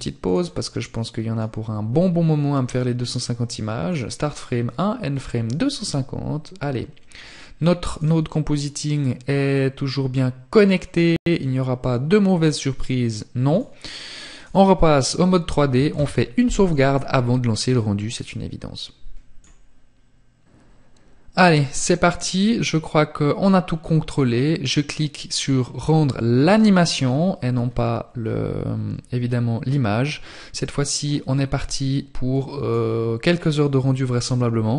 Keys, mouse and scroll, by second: 6.1 click, 12.5 click.